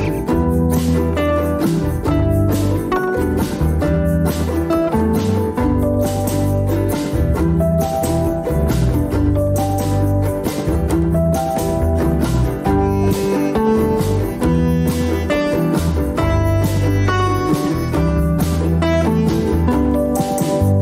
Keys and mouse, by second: 0.3 alt+z, 1.4-3.1 drag, 4.9 shift+click, 15.4 ctrl+r, 20.4 ctrl+r.